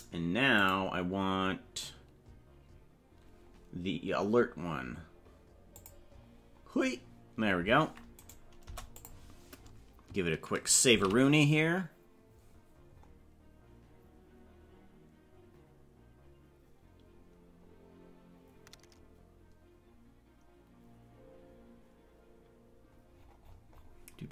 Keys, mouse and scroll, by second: 0.5 click, 5.7 click, 8.1 right click, 8.6 Delete, 10.9 ctrl+s.